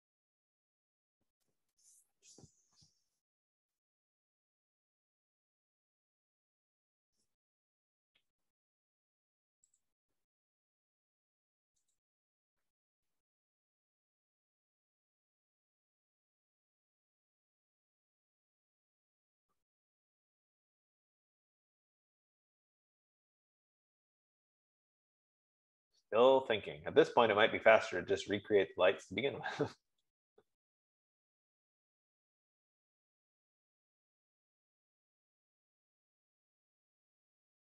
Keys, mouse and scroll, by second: 10.4 F15.